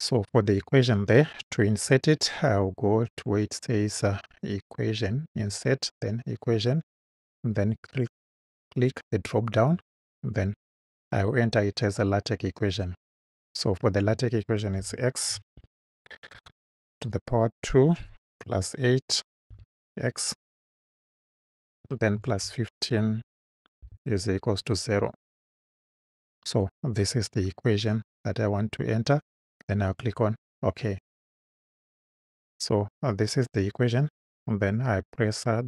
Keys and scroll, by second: 14.8-16.3 typing, 18.5 8, 19.5 x, 22.2 1, 22.5 5, 23.8 =, 25.3 0.